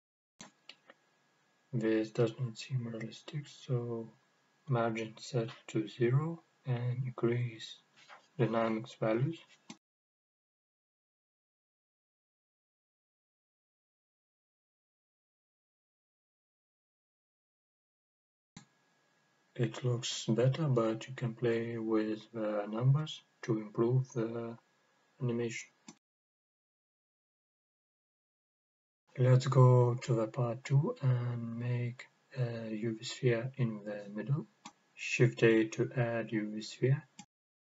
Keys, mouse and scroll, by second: 4.4 click, 5.7-7.4 drag, 8.5 click, 13.6 click, 15.4-19.6 drag, 22.5 scroll up 2, 23.2-28.4 middle drag, 30.7 click, 32.9 click, 35.2 right click, 36.6 shift+a.